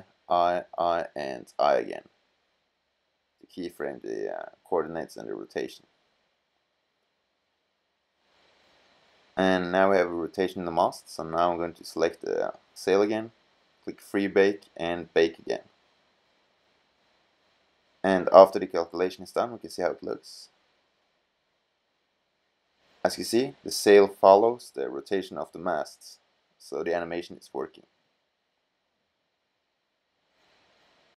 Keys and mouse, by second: 0.0 i, 0.5 i, 1.2 i, 5.1 i, 6.8 middle click, 17.3 middle click, 22.4 middle click, 27.6-27.9 middle drag.